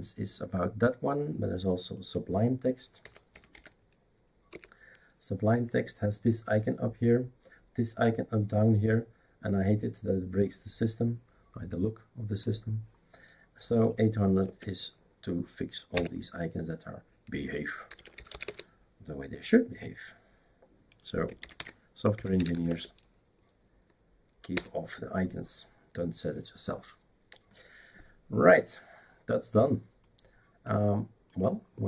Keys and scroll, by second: 2.8-4.0 typing, 4.5 Return, 14.4 Tab, 15.9 Return, 17.6-18.8 typing, 21.4-23.0 typing, 24.5 Return.